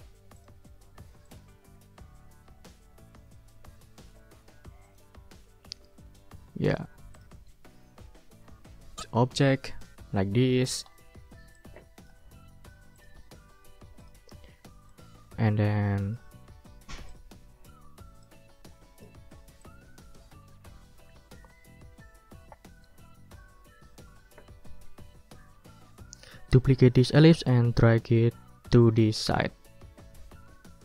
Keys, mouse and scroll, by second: 0.4 click, 1.2 ctrl+click, 1.5-2.2 ctrl+scroll up 3, 2.2 ctrl+scroll down 2, 4.8 ctrl+click, 5.4-5.8 ctrl+scroll down 2, 6.0 ctrl+middle click, 7.1 ctrl+click, 7.5 ctrl+scroll up 2, 9.8-10.9 ctrl+drag, 11.1 ctrl+click, 11.5 click, 12.9 click, 14.0 click, 14.4 click, 14.9-16.3 drag, 17.1 ctrl+click, 18.2-19.2 ctrl+drag, 19.6-26.5 drag, 27.9-28.2 scroll up 2, 28.2-29.3 drag, 29.9 ctrl+d.